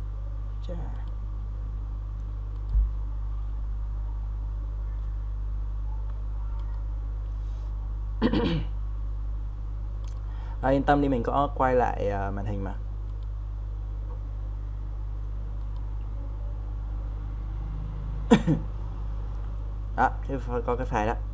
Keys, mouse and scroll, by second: 4.0 click, 17.1 click, 18.9-19.8 scroll down 1, 20.7-21.3 drag.